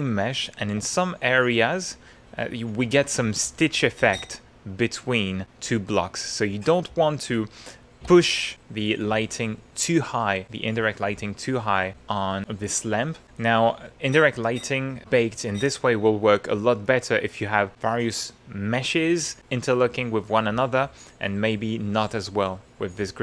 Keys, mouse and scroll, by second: 0.9-1.9 shift+drag, 3.9 ctrl+click, 5.8 middle click, 6.6 click, 7.3 ctrl+middle click, 11.4-12.4 drag, 12.9 middle click, 23.0 middle click.